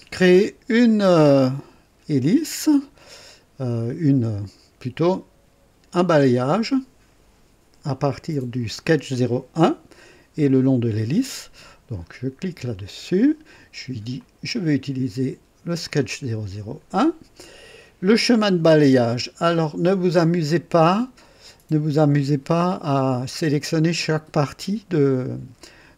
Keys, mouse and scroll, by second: 12.7 click, 14.1 click, 15.8 click.